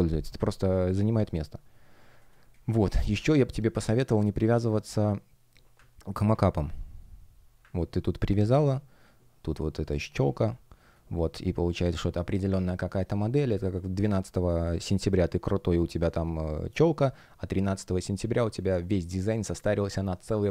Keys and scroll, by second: 2.4 space, 9.9 space, 13.4 space.